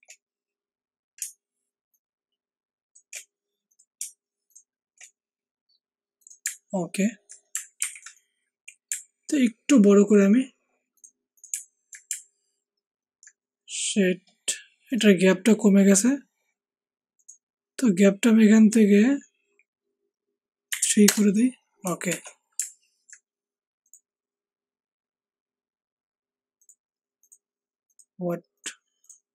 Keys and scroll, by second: 7.7 ctrl+alt+t, 20.8 3, 21.0 Return, 22.0 shift+Escape.